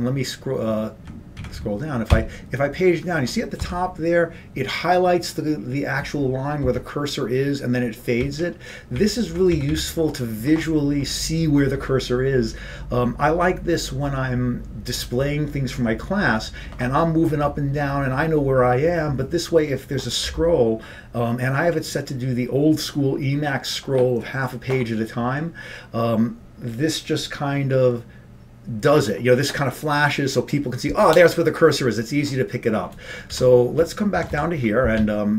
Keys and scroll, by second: 2.2 Up, 2.2 Page_Up, 3.1 Page_Down, 3.7 Page_Down, 8.9 Page_Down, 8.9 Up, 9.8 Up.